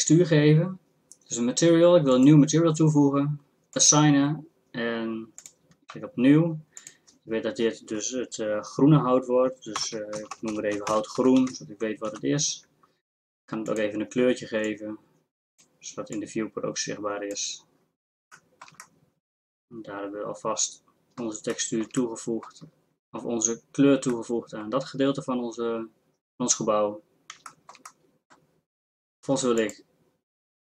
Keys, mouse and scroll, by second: 2.3-2.8 drag, 18.9-20.7 drag, 21.7 middle click, 22.7 middle click, 23.5-27.0 middle drag, 27.8 middle click.